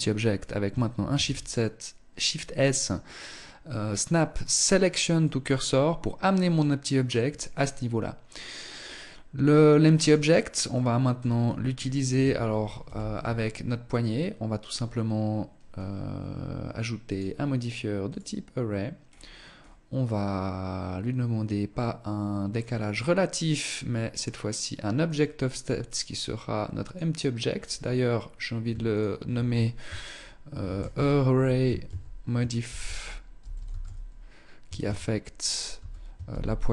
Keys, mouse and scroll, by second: 0.4 shift+s, 5.4-6.9 scroll up 4, 6.9 right click, 7.7 right click, 9.4 right click, 9.9 middle click, 10.6-11.5 scroll down 5, 12.1 KP_1, 13.9 right click, 16.3 click, 18.3-19.5 scroll down 4, 19.5 scroll down 2, 21.9 click, 23.4 click, 24.3 click, 27.8 ctrl+click.